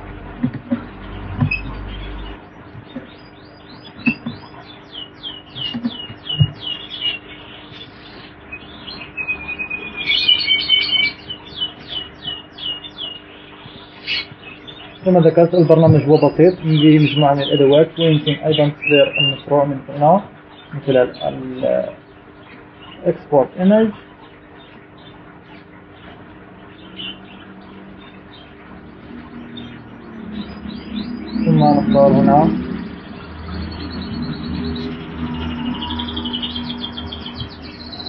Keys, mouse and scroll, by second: 1.1 click, 2.3 shift+Return, 4.4 shift+Return, 5.8 ctrl+Return, 7.5 alt+Return, 9.4-12.0 drag, 13.0-14.2 drag, 15.3 click, 15.9 click, 20.1-21.3 drag, 21.9 click, 25.5 click, 34.8 click, 35.8 click.